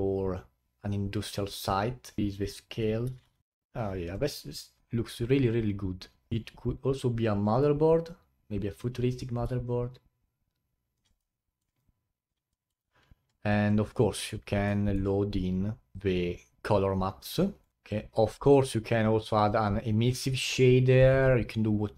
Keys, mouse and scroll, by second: 1.5 middle click, 2.2-3.4 drag, 6.3-9.3 alt+drag, 9.7-11.2 alt+drag, 11.2-11.8 alt+middle drag, 11.8-12.6 alt+drag, 12.6 alt+middle click, 13.1-13.9 scroll down 15, 13.9-15.3 middle drag, 15.3-16.2 scroll up 6, 17.6 click, 17.7-19.0 drag.